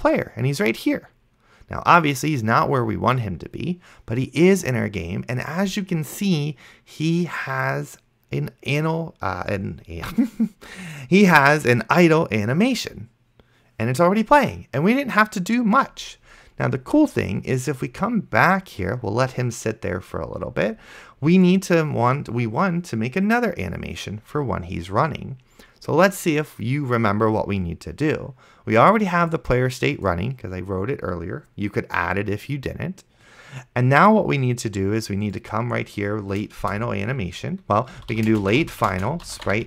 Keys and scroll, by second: 36.9 Return, 37.7-39.6 typing.